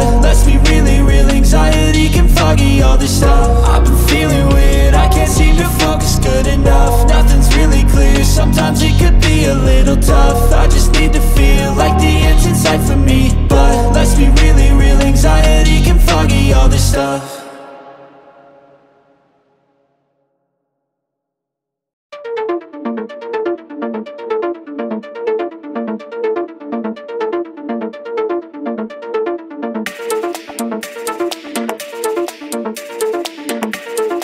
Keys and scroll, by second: 7.3 ctrl+-, 9.7 ctrl+c, 14.0 ctrl+v, 32.8-34.2 typing.